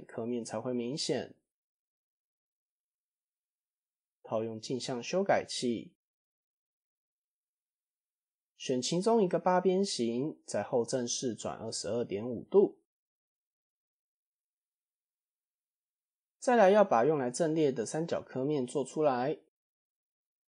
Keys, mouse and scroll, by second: 0.4 click, 1.4-1.8 scroll up 1, 2.8 Tab, 3.0 middle drag, 4.2 click, 5.4 Tab, 5.8 KP_Enter, 5.9 KP_1, 6.7 KP_3, 7.4 click, 7.8 alt+click, 9.5 ctrl+KP_1, 10.8 r, 12.4-14.3 drag, 13.1 KP_2, 14.8 middle click, 15.4 click, 15.9 click, 16.4 shift+click, 16.8 shift+click, 17.8 f, 18.0 click, 18.6 shift+click, 18.9 shift+click, 20.0 f, 20.1 middle click.